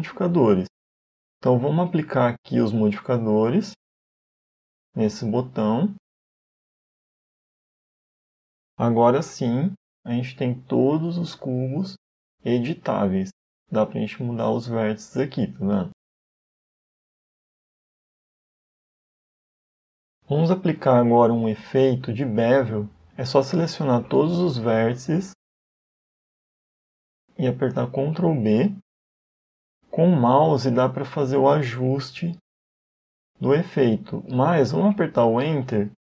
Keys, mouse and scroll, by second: 0.0-0.3 scroll down 2, 0.3 middle click, 1.6 click, 3.5 click, 4.8 click, 5.2 click, 6.6 click, 7.0 click, 7.7 Tab, 8.0-8.5 scroll up 2, 8.5 scroll down 2, 9.8 click, 10.2-10.5 scroll down 1, 10.5 a, 10.7 a, 12.7 right click, 13.7 g, 15.5 Tab, 17.5 click, 18.2 Tab, 18.8 middle click, 22.2 a, 22.4 a, 23.1 a, 28.3 ctrl+b.